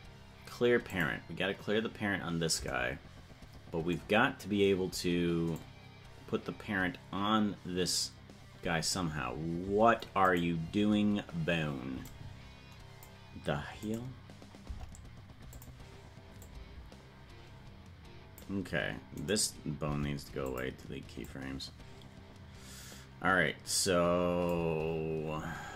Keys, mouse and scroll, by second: 5.6-9.0 drag, 10.4 right click, 12.1 click, 13.8 right click, 14.6 Delete, 16.5-18.5 drag, 19.2-19.8 right drag, 19.8 Delete, 21.3-24.6 drag.